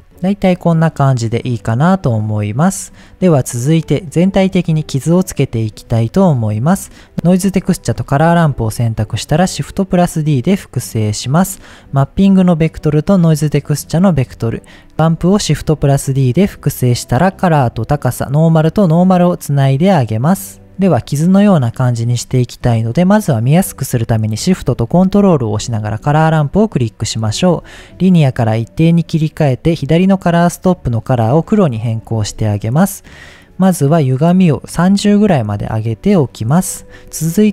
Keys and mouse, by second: 1.0 middle click, 1.6 middle click, 5.8 middle click, 6.8 click, 7.2 click, 7.7 shift+click, 8.5 shift+d, 9.3-9.7 drag, 9.7 middle click, 10.4 click, 11.1 click, 11.7 click, 12.5-13.8 drag, 13.9 click, 14.7 click, 15.3 shift+d, 16.1-17.8 drag, 18.2-19.1 drag, 19.6-20.4 drag, 20.6 click, 20.8 drag, 21.7 middle click, 24.7 ctrl+shift+click, 25.8 shift+middle click, 27.3-28.5 drag, 29.1 click, 30.4 click, 31.9 click, 34.1-37.0 drag.